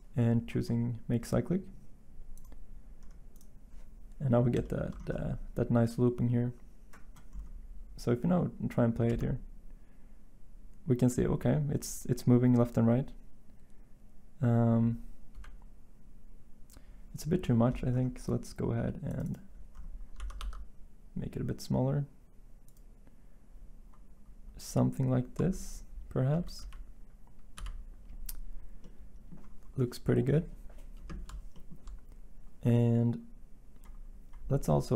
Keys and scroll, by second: 15.3 Home, 20.1 s, 26.6 End.